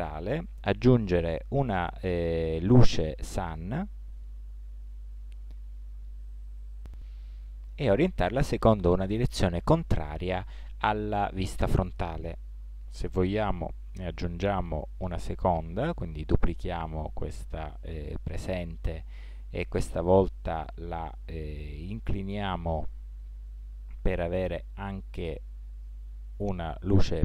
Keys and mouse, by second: 1.0 shift+a, 5.0 g, 9.0 r, 15.6 shift+d, 22.7 r.